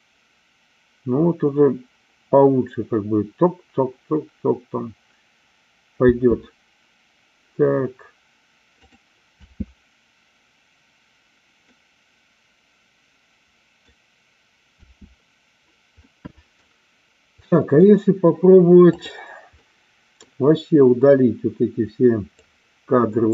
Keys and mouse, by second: 6.1 space, 8.7 click, 9.3 space, 11.7-13.8 middle drag, 14.7 space, 16.0 middle click, 17.3 middle click, 19.5 middle click, 22.3-23.3 drag.